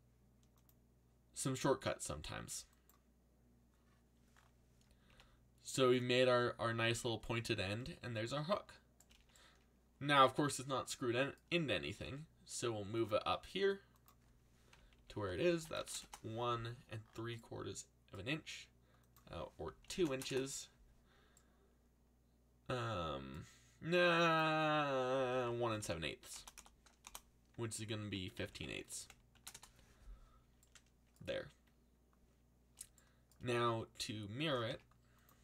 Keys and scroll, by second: 5.1 a, 6.8 z, 9.0 a, 11.6-12.4 typing, 14.7-16.4 typing, 19.6-20.7 typing, 25.1-29.3 typing, 29.5 Return, 34.2-35.2 typing.